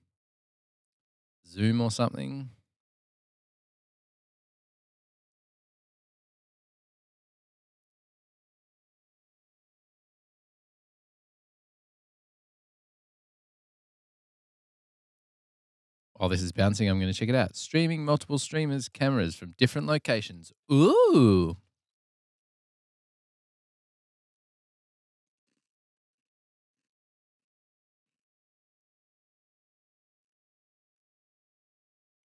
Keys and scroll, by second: 2.3 super+t, 2.8-7.3 typing, 12.5 Left, 13.4-16.7 typing.